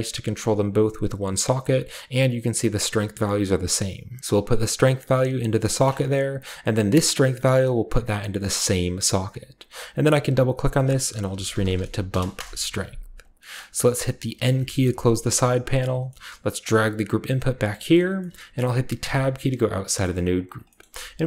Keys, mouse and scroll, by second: 4.3-5.8 drag, 6.3-7.5 scroll up 2, 7.5-8.7 drag, 7.5-8.7 scroll up 1, 9.5-10.7 scroll down 2, 10.0 click, 10.2 click, 10.6 click, 11.3-12.1 typing, 12.3 Return, 13.2-14.3 scroll down 2, 14.1-14.8 typing, 14.3-15.4 scroll down 1, 15.8 middle click, 15.9-17.9 scroll down 1, 16.0-16.8 typing, 16.3-17.9 middle drag, 16.6-19.8 drag, 19.0 Tab, 19.4 middle click, 19.4-20.1 scroll up 1, 20.0-20.5 middle drag, 20.3 click, 20.9 a, 21.1 click, 21.1 middle click.